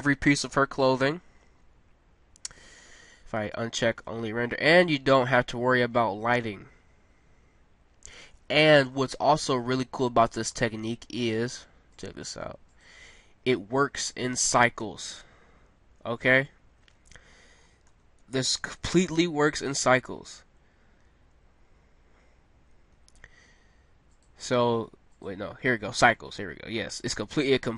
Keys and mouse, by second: 0.0 Escape, 0.6 middle click, 4.6-6.9 middle drag, 9.1-10.9 middle drag, 11.9 click, 14.8 a, 15.6 middle click, 17.2 middle click, 18.4-19.9 middle drag, 24.1-26.0 drag, 26.4 middle click, 27.0 middle click.